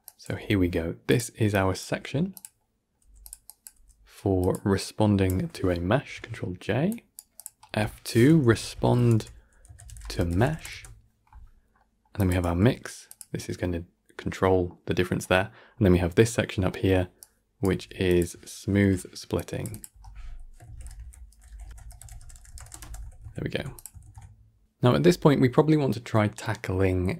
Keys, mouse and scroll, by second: 1.4 click, 5.8 ctrl+j, 7.3 click, 12.0 click, 17.1-17.5 drag, 18.6 ctrl+j, 19.7 click, 22.7 shift+t, 24.6-26.3 drag, 26.3-27.1 middle drag.